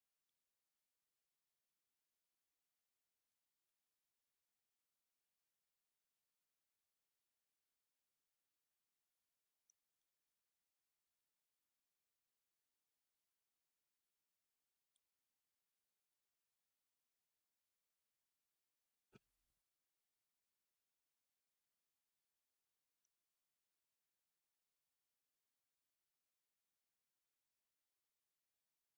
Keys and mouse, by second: 1.1 middle drag, 3.1-3.5 middle drag, 9.8 middle drag, 10.9 middle click, 12.1 middle drag, 12.8 middle drag, 13.7 middle drag, 14.6 middle drag, 15.6-16.0 middle drag, 23.3-28.9 shift+drag.